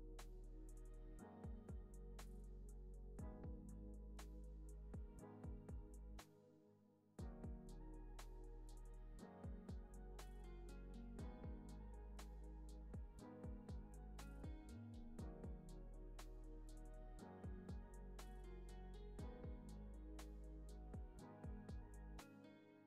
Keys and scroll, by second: 1.3 0, 1.4 Return, 2.7 super+s, 12.4-13.5 typing, 15.2-16.2 typing.